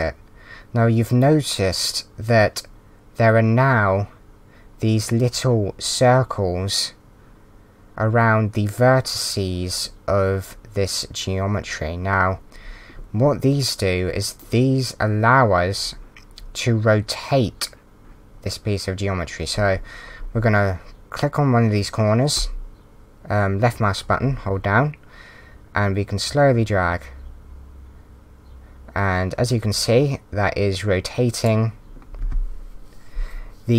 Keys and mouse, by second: 22.3 click.